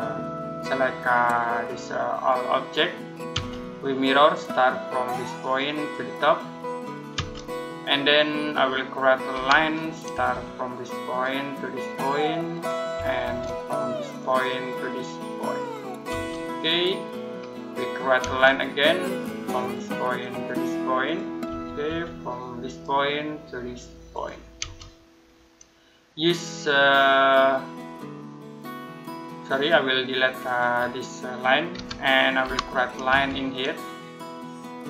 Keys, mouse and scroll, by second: 3.2 space, 5.2 click, 7.0 space, 7.6 middle click, 9.2 l, 10.0 space, 10.9 click, 12.8 space, 14.0 click, 15.9 space, 16.4 middle click, 17.2-17.6 scroll up 1, 17.6 middle click, 18.1 space, 19.4 click, 21.3 space, 22.5 click, 24.4 space, 25.1 middle click, 29.3 click, 31.6 Delete, 32.3 l, 32.9 space, 34.7 click.